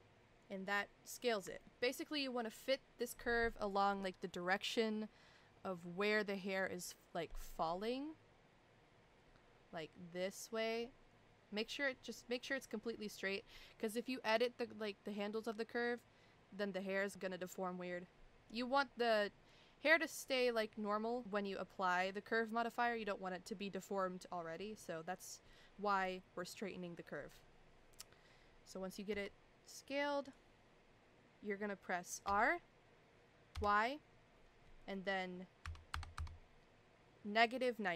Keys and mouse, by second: 1.6 shift+middle click, 29.1 s.